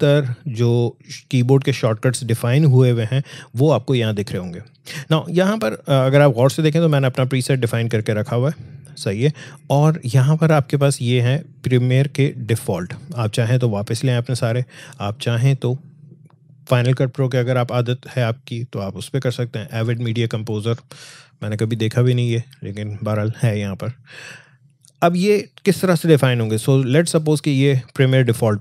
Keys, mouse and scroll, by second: 5.5 click, 12.4 click, 15.0 click, 27.5 click.